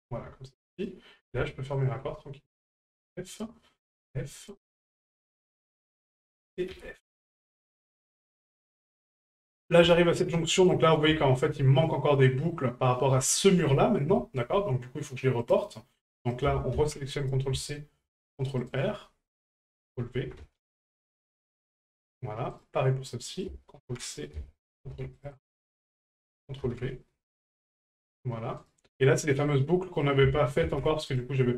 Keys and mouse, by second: 0.8 right click, 1.7 shift+right click, 3.3 right click, 4.5 right click, 5.3 right click, 6.4 right click, 7.3 middle drag, 8.0 shift+middle drag, 8.4 middle drag, 8.9 shift+middle drag, 9.3 middle click, 9.9 shift+middle drag, 10.3-10.6 middle drag, 11.2 shift+middle drag, 12.3 middle drag, 13.3 shift+middle drag, 14.2 shift+middle click, 15.4 right click, 16.4-17.4 ctrl+drag, 19.5-21.4 ctrl+drag, 22.5 right click, 23.4 ctrl+click, 26.1-27.4 ctrl+drag, 28.6 right click, 30.1-31.2 drag.